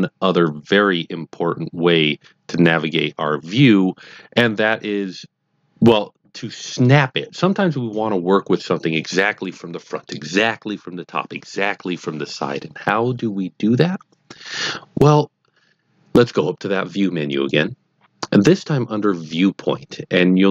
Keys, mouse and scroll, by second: 17.2 click.